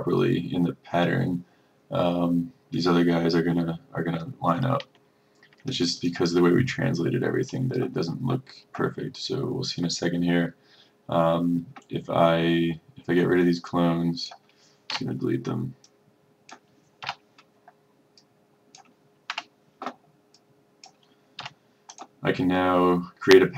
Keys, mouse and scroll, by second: 5.1-5.4 ctrl+scroll, 6.1 click, 15.0 Delete, 16.0 click, 17.1 Delete, 18.3 click, 19.4 Delete, 20.4 click, 21.5 Delete, 22.0-23.5 drag.